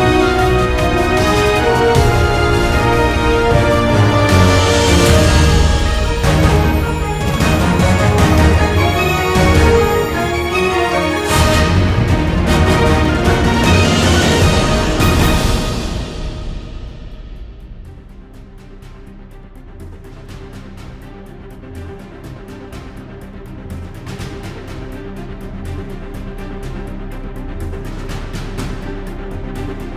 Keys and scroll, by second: 3.7 super+-, 4.0 super+=, 4.2 super+=, 7.6 super+-, 8.8 super+=, 9.1 space, 11.1 super+z, 14.5 `.